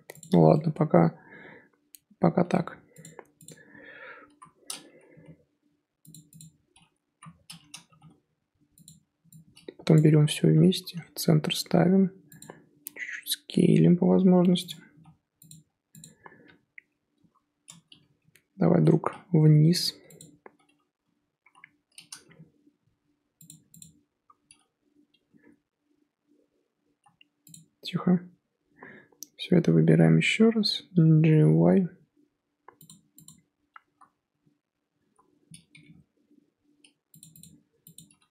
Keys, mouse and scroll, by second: 3.4 click, 4.2 l, 5.1 g, 6.4 click, 7.1 l, 7.8 g, 9.9 click, 10.4 g, 12.8 s, 14.9 g, 16.0 click, 17.1 l, 18.2 g, 20.1 click, 21.0 l, 21.4 l, 22.2 g, 23.8 click, 26.6 l, 27.5 click, 27.9-30.3 l, 31.3 g, 33.2 click, 34.3-34.9 l, 35.7 g, 37.4 click, 37.9 click.